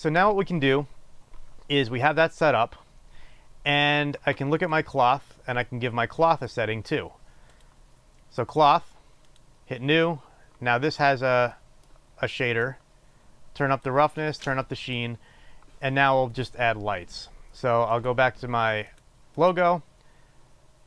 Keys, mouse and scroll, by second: 0.3-8.2 drag, 10.1-18.7 drag.